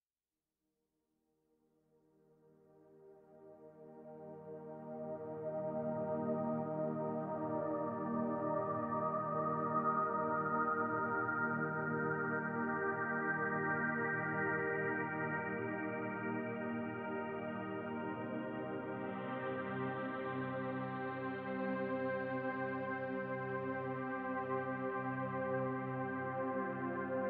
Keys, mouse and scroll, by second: 0.6 shift+click, 0.9 shift+click, 2.0 ctrl+a, 4.4 click, 5.0 ctrl+a, 7.3 click, 8.6 e, 11.0 e, 12.1 click, 12.3 e, 13.4 click, 14.5 e, 16.5 e, 18.5 click, 18.8 e, 21.4 middle click, 23.6 shift+click, 24.9 ctrl+a.